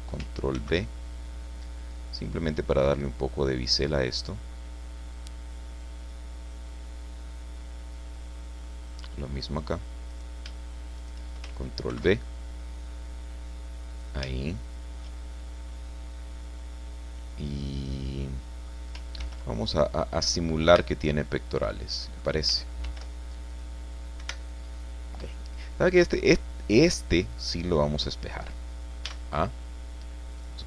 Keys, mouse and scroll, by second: 0.5 ctrl+b, 5.1 click, 5.6-9.1 middle drag, 9.1-9.6 scroll up 2, 9.6 scroll up 1, 9.9 middle click, 10.1 right click, 11.0 shift+right click, 11.9 ctrl+b, 13.9 click, 14.3-16.6 shift+middle drag, 16.6-18.9 drag, 19.2 ctrl+r, 20.2 click, 20.6 Escape, 21.2 middle click, 21.3 click, 21.4 middle click, 22.0 click, 22.8 ctrl+r, 23.5 click, 24.2 Escape, 24.7 scroll down 2, 25.7-27.5 middle drag, 29.0 a, 30.3 click.